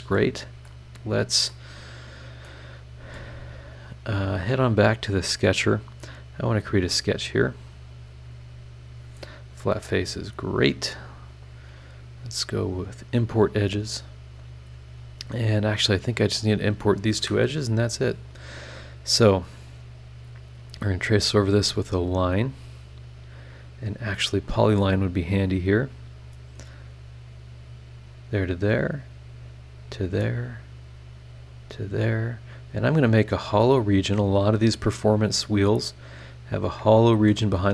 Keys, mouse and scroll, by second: 0.6-1.7 middle drag, 0.7 click, 0.7 right click, 2.4 middle click, 2.5 click, 2.5 right click, 4.5 click, 5.5 click, 6.4 click, 7.8 click, 9.3 click, 10.2-11.1 scroll up 5, 12.6 click, 15.5 click, 16.7 click, 17.2 Escape, 18.4 click, 20.1 click, 22.6 click, 24.4 click, 26.2 click, 28.1 click, 29.8 click, 31.5 click, 32.8 click, 33.8 click, 35.2 click, 36.6 click, 37.1 Escape.